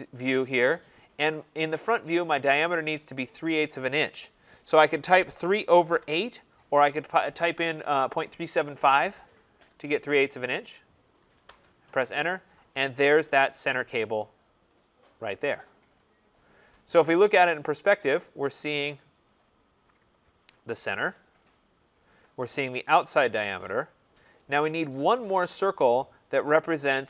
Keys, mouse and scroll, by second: 5.1-6.4 typing, 9.6 shift+', 11.4 Return, 13.0-14.7 scroll, 14.7 click, 14.8 middle click, 17.9 click, 18.1 click, 18.9 click, 19.3 middle click, 19.4 middle click, 19.9 middle click, 20.1 middle click, 21.3 click, 21.8 middle click, 21.8 middle click, 21.9 middle click, 23.1 click, 23.7 middle click, 23.8 middle click, 25.1-26.2 scroll.